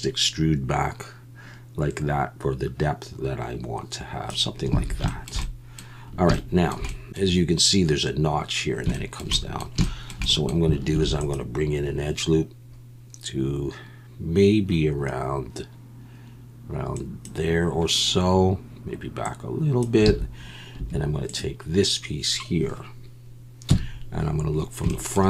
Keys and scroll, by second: 4.8 alt+a, 10.9 ctrl+r, 20.1 alt+a, 20.8 2, 23.7 KP_1.